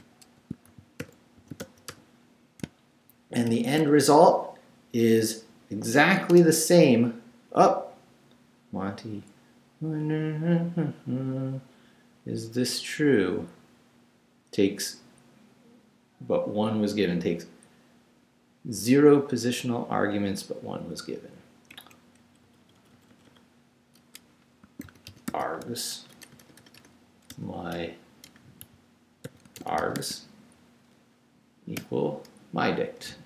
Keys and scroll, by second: 0.0-3.5 typing, 6.3 Return, 21.7 Up, 22.2 Left, 24.4-26.2 typing, 27.7-30.5 typing, 31.8 =.